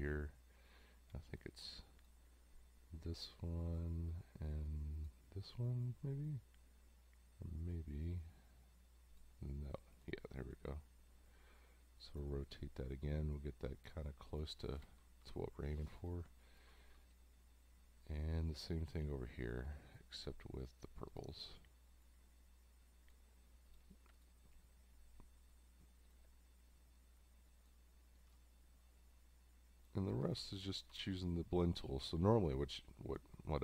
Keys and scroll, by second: 15.2 Down, 16.3 space, 30.4 space.